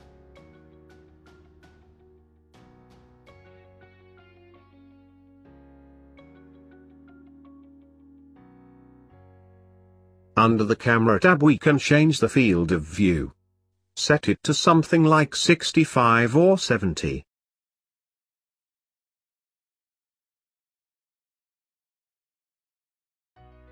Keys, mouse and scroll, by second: 4.1-7.5 drag, 7.5 n, 8.6-10.5 middle drag, 10.5 click, 11.9-19.1 drag, 20.4 scroll down 3, 20.8-23.6 middle drag, 23.6 click.